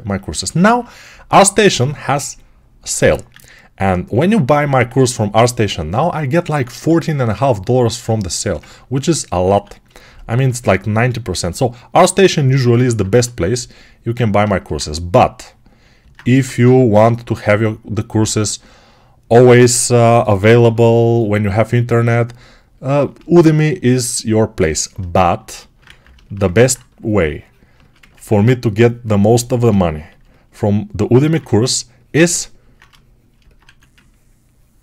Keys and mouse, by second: 0.0-34.8 ctrl+alt+shift+right drag, 2.9 1, 6.5 alt+q, 10.4 1, 13.0 2, 16.2 1, 19.8 g, 20.2 [, 20.4 [, 25.7 ctrl+z, 28.2 2, 32.0 alt+2, 33.5 1.